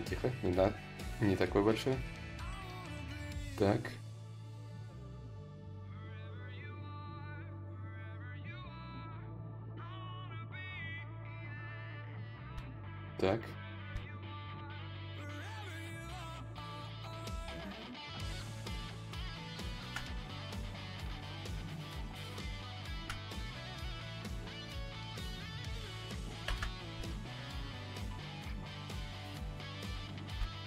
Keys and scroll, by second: 5.1 s, 6.7 s, 23.5 ctrl+z, 24.3 ctrl+z, 24.9 ctrl+z, 25.1 ctrl+z, 25.6 ctrl+z.